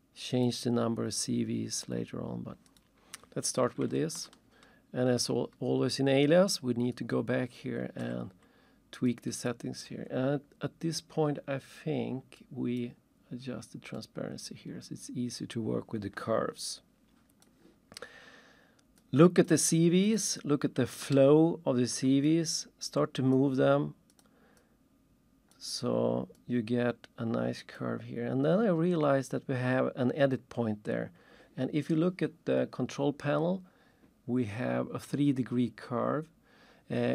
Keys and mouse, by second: 0.3 click, 2.7 click, 5.2 ctrl+shift+click, 6.9 ctrl+shift+click, 9.1 click, 9.4 click, 12.4 click, 12.8 click, 17.4 click, 19.0 click, 19.4 click, 21.0 ctrl+shift+middle click, 22.3 click, 23.3 click, 25.5 click, 27.8 click.